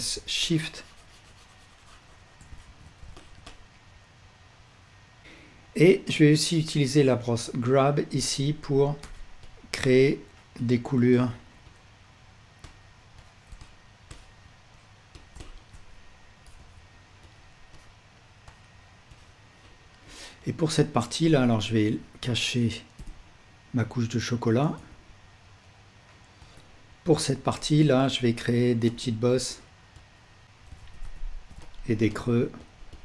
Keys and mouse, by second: 2.7 ctrl+z, 9.8-17.3 drag, 17.7-21.6 drag, 21.4 Tab, 23.0 l, 24.8 h, 26.4-30.0 drag, 26.4 Tab, 29.2 ctrl+z, 29.2 f, 30.2-31.3 drag, 31.4 ctrl+z, 31.4-33.0 ctrl+drag.